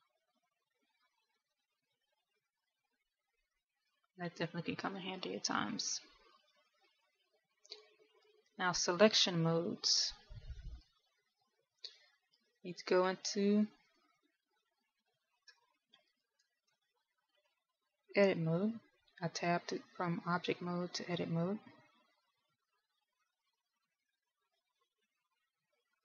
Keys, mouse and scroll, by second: 15.1 middle click, 16.1 middle click, 17.2 KP_1, 17.8 right click, 18.9 Tab.